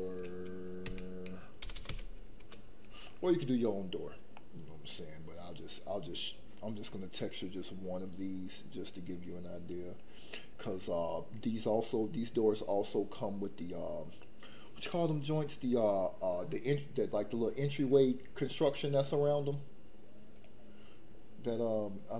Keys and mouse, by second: 2.4 o, 4.4-5.5 middle drag, 20.3 click.